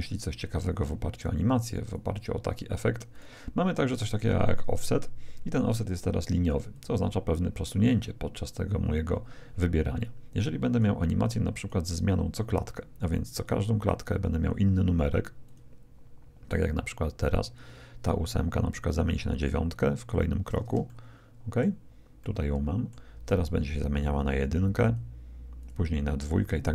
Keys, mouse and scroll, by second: 1.9-3.5 drag, 4.1-5.9 drag, 6.7-8.5 drag, 10.7-12.4 drag, 13.5-15.3 drag, 15.4-17.2 drag, 19.3-21.0 drag, 20.9-24.2 middle drag, 24.8-26.7 drag.